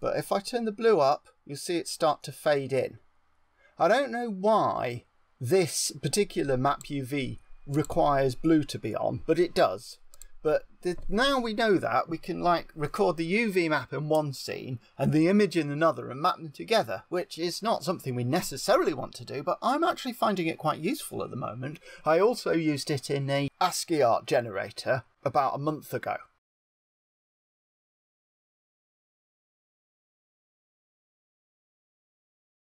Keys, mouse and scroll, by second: 7.7 click, 10.2 click, 13.1 typing.